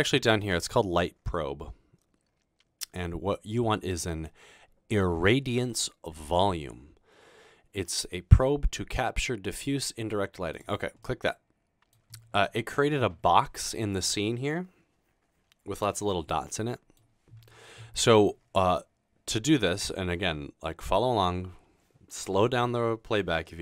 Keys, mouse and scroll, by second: 10.6 click.